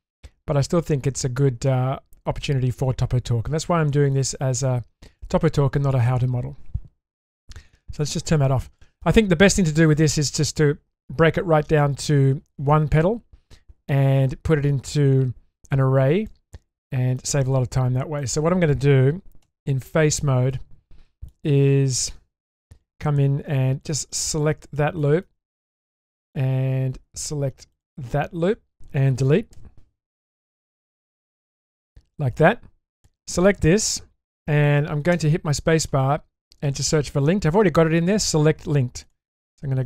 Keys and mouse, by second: 3.4 middle click, 5.2 middle click, 8.6 middle click, 10.0 middle click, 11.8 middle click, 16.3 middle click, 17.7 Tab, 18.2-18.7 middle drag, 19.4 3, 20.5-21.3 shift+middle drag, 22.5-23.0 shift+middle drag, 24.1 ctrl+alt+click, 25.0 middle click, 25.5-25.8 shift+middle drag, 26.0 middle click, 29.5 Delete, 33.0 click, 35.2 space, 39.6 middle click.